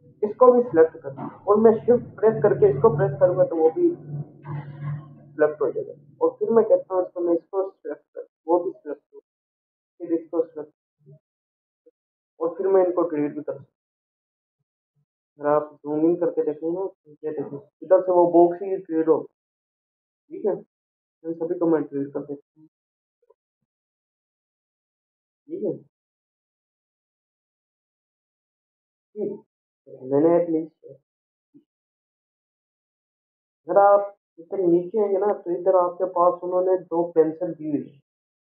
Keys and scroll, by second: 14.1 Delete, 16.8 ctrl+=, 22.7 ctrl+a, 23.8 Delete, 27.1 ctrl+-, 27.4 ctrl+0.